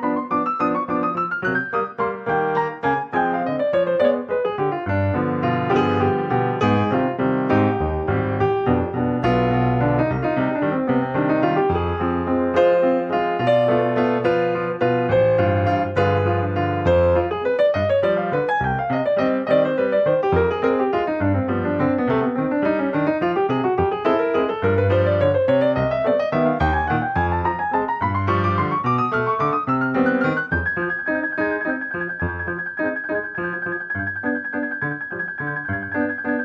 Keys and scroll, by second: 34.4 ctrl+g.